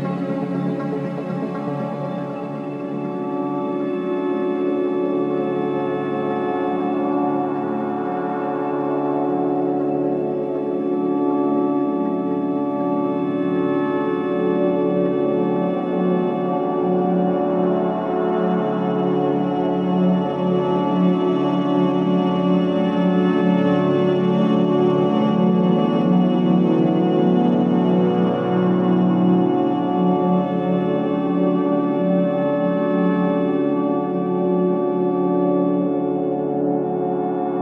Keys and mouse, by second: 1.8 click, 6.3-9.1 drag, 14.8 click, 17.1 Tab, 18.4-19.2 middle drag, 19.4 Tab, 20.1 middle click, 20.8 click, 22.4 click, 22.7 Tab, 26.2 click, 29.3 click, 30.8 click, 31.9 click, 32.8 middle click, 35.2-36.5 shift+middle drag.